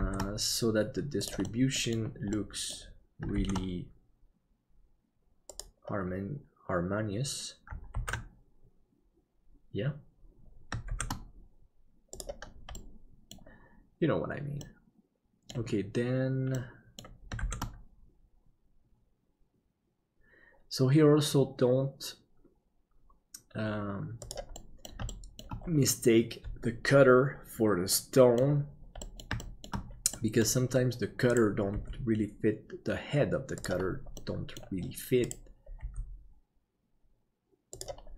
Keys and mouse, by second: 0.0 shift+d, 2.4 middle click, 3.4 shift+d, 8.4 ctrl+s, 10.9 shift+d, 12.9 middle click, 14.7 middle click, 16.6 middle click, 17.4 shift+d, 24.6 middle click, 25.1 shift+middle click, 27.9 middle click, 29.1 shift+middle click, 30.2 middle click, 31.7 g, 34.2 middle click, 35.8 g.